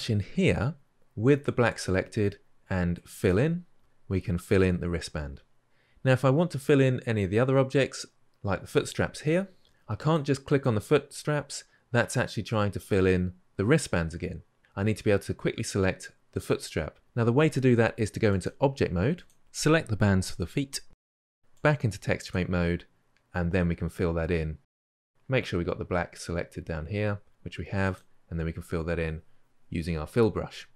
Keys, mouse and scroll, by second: 3.1-19.4 drag, 22.1-30.7 drag.